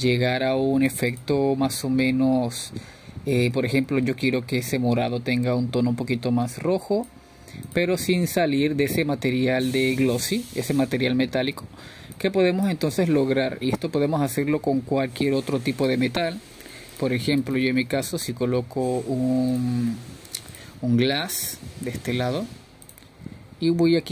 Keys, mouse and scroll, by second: 3.0-8.2 drag, 11.3-15.0 middle drag, 15.4-21.5 drag, 21.5 s.